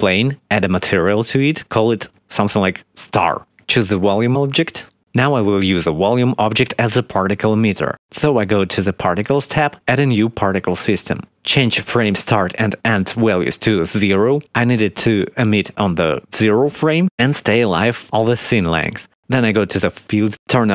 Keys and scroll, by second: 2.7 shift+s, 3.1 t, 3.3 a, 3.4 r, 3.6 Return, 13.2 0, 13.3 Return, 13.7 0, 13.8 Return, 15.6 5, 16.2 0, 17.0 Return.